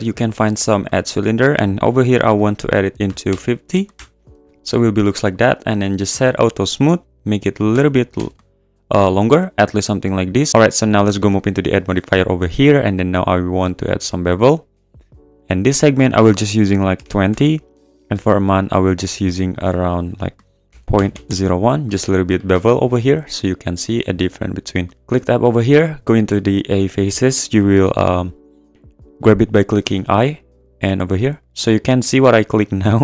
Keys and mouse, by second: 1.3-4.0 drag, 5.3-7.7 drag, 7.7 s, 8.1 z, 11.5-14.2 drag, 15.8-17.3 drag, 18.7-19.3 drag, 19.9-21.3 drag, 25.0 Tab, 29.8 i, 31.4 click.